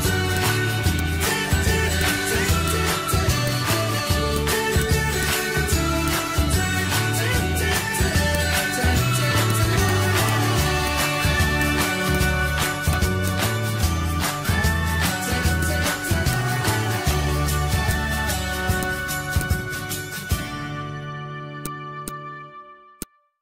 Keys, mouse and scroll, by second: 0.0 z, 0.3-5.8 drag, 5.8 ctrl+z, 6.0-9.5 drag, 11.3 ctrl+z, 11.6 click, 13.4 scroll down 1, 13.9 scroll down 1, 14.2-14.6 scroll up 1, 15.0 scroll down 1, 15.6 click, 16.6 z, 16.9-21.6 drag.